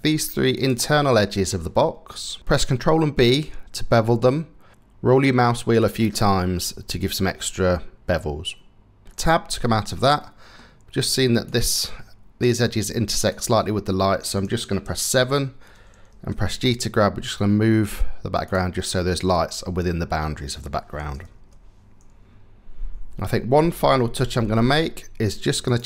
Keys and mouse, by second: 0.4 middle click, 1.1-2.1 middle drag, 2.1 click, 2.4 ctrl+b, 9.1 Tab, 9.8 click, 11.1 click, 12.1 click, 12.9 click, 14.5 KP_7, 16.1 g, 20.9 KP_0, 24.0 shift+`.